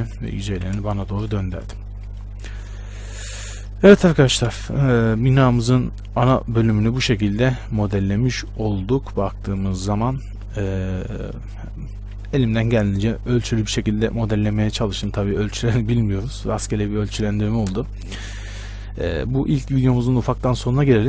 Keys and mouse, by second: 0.3 Tab, 0.7 a, 1.6 a, 4.7 shift+space, 6.5-15.0 drag.